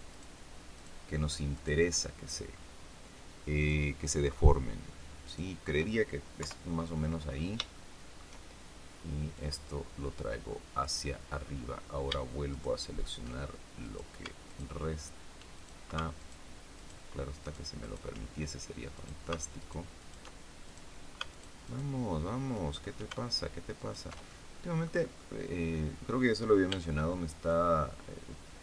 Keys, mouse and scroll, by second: 0.0 shift+right click, 0.7 shift+right click, 1.5 shift+right click, 3.5 shift+right click, 5.1 shift+right click, 6.3 KP_3, 7.2 scroll down 3, 7.7 shift+middle click, 9.3-10.9 drag, 11.3 scroll up 2, 12.5 alt+shift+right click, 13.7 shift+right click, 14.4 alt+shift+right click, 15.5 alt+shift+right click, 16.1 alt+shift+right click, 16.7 alt+shift+right click, 17.3 alt+shift+right click, 18.9 shift+right click, 19.5 alt+shift+right click, 19.9 alt+shift+right click, 20.6 alt+shift+right click, 21.3 alt+shift+right click, 21.6 alt+shift+right click, 22.5 alt+shift+right click, 23.7 alt+shift+right click, 24.2 alt+shift+middle click, 25.1-26.2 middle drag, 26.6 b, 27.5-28.6 drag.